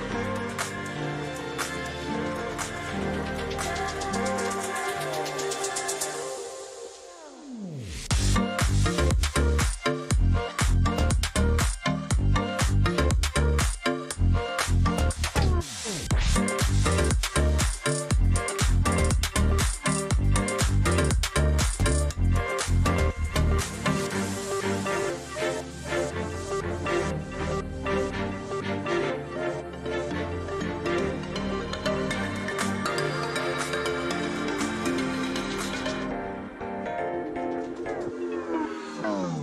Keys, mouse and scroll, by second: 0.0-2.1 typing, 1.5-1.8 Right, 2.7-3.2 Left, 3.4 Right, 3.5 Right, 3.6 Right, 3.8 Left, 4.0 Left, 4.3 Left, 4.6 g, 5.2 ctrl+a, 6.9-8.8 drag, 10.0-10.8 drag, 12.8-13.8 drag, 17.1-18.9 drag, 21.9 click, 26.7 click, 28.2 click, 33.8 click, 34.9-35.9 drag, 36.6-37.6 drag, 37.8 click, 38.8-39.4 drag.